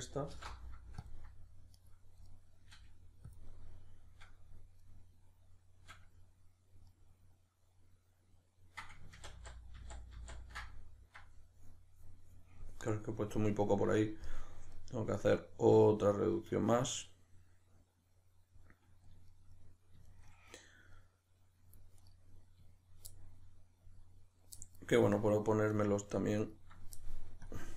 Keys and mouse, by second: 0.3 alt+m, 1.8 right click, 2.3-3.4 middle drag, 2.7 g, 3.4 click, 3.5-22.0 middle drag, 9.2 ctrl+z, 22.0 right click, 23.1-25.1 middle drag, 25.1 right click, 25.7 right click, 26.4 ctrl+right click, 27.4-27.7 drag.